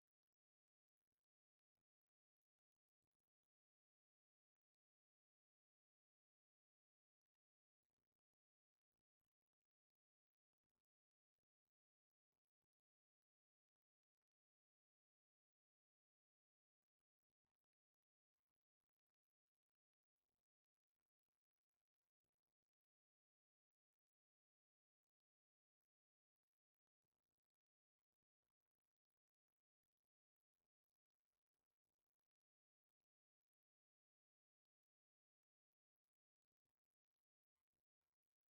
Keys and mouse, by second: 3.7-9.0 middle drag.